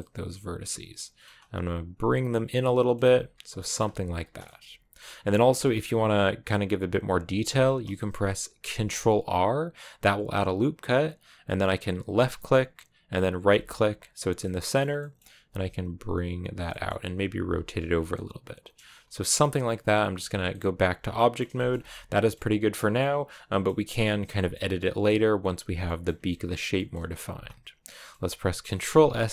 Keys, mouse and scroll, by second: 1.2 g, 2.4 middle click, 2.9 g, 3.2 middle click, 3.7 g, 4.1 scroll down 2, 4.2-5.6 middle drag, 5.6-8.5 shift+scroll up 3, 8.5 ctrl+r, 14.2 middle click, 15.2 g, 16.5 middle click, 16.9 r, 17.2 g, 17.7 scroll down 4, 17.9 middle click, 18.7 Tab, 18.8 scroll down 2, 19.0-20.1 middle drag, 20.1 a, 20.3-21.5 middle drag, 21.5 scroll down 2, 21.7 middle click, 22.4-22.8 scroll up 1, 22.8-23.8 middle drag, 23.8-24.3 scroll up 2, 24.3 middle click, 25.2 right click, 25.7 middle click, 25.9 a, 26.1-29.3 middle drag.